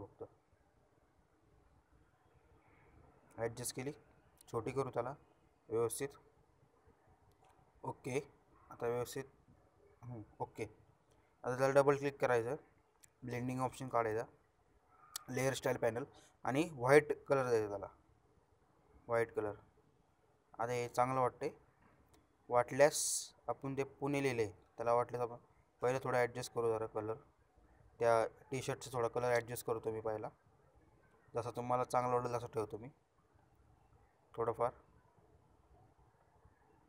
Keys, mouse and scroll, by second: 0.1 ctrl+shift+t, 0.6 ctrl+shift+t, 1.2-2.8 shift+drag, 14.7-16.4 shift+drag, 18.8-19.4 alt+shift+scroll down 2, 19.4-19.8 shift+scroll down 1, 19.8 shift+click, 23.1 ctrl+shift+b, 24.6 click, 24.7-25.9 shift+drag, 33.7 ctrl+shift+u, 35.9-36.8 shift+drag.